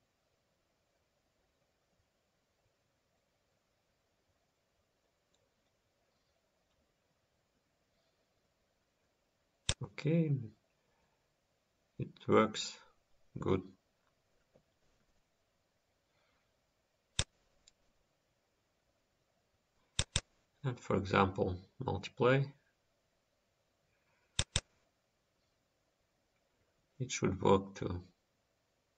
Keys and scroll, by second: 4.5 F10, 5.7 F10, 6.8 F10, 27.4 ctrl+s.